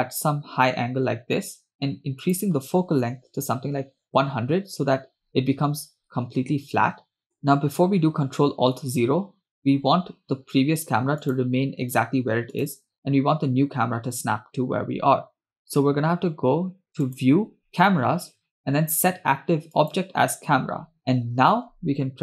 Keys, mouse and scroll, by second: 2.3-4.4 drag, 3.8 0, 7.2 ctrl+z, 11.3 click, 12.7 click, 17.1-20.6 drag.